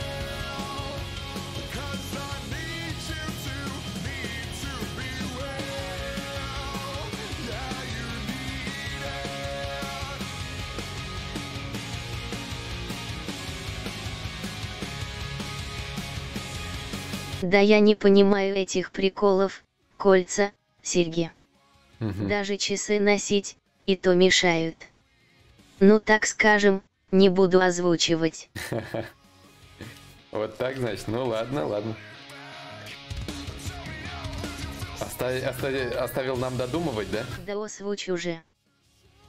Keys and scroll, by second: 2.5 ctrl+z, 3.9 ctrl+/, 31.9 ctrl+z.